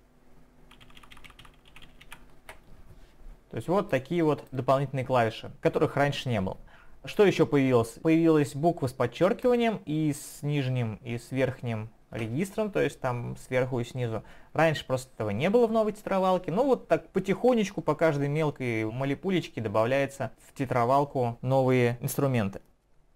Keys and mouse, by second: 3.9 click.